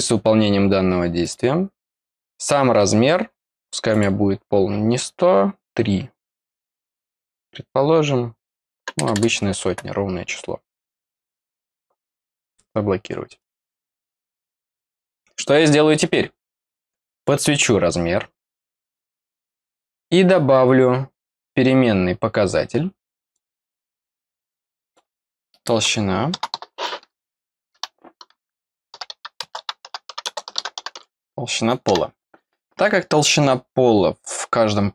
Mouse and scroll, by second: 1.2 click, 2.0 click, 3.8 click, 10.8 click, 12.4 click, 13.3-17.2 drag, 23.2 click, 24.8 click.